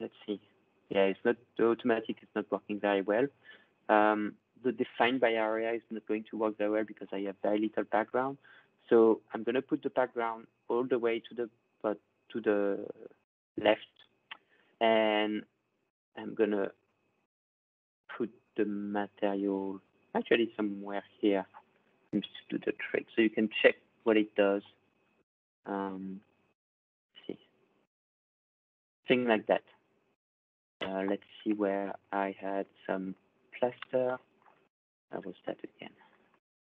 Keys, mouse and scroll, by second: 0.0 ctrl+scroll down 10, 1.1-4.9 drag, 10.4-15.5 drag, 21.1 click, 21.6-23.1 ctrl+scroll, 23.8-24.3 scroll, 26.0 click, 27.5-28.5 scroll, 28.5 click, 29.4 middle click, 29.4 click, 30.5 click, 30.8-31.2 scroll, 31.9-33.1 scroll, 34.1-34.5 ctrl+scroll, 35.0 ctrl+click, 36.2-36.8 scroll.